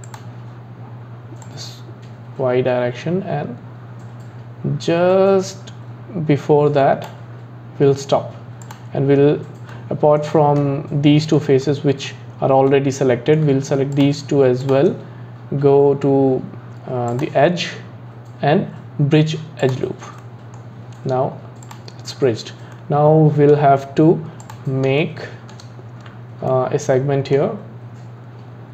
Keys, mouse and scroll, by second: 1.4 click, 8.7-9.7 drag, 9.7-13.9 middle drag, 13.9 shift+click, 14.6 shift+click, 17.1-20.1 drag, 20.2-21.6 middle drag, 21.6 click, 22.2-22.6 scroll down 3, 22.7-24.4 middle drag, 24.4 click, 25.0-28.7 shift+middle drag.